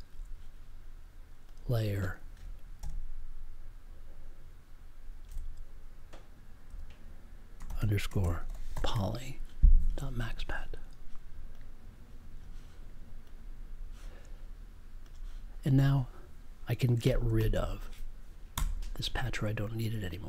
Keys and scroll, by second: 6.6 BackSpace, 18.5 BackSpace.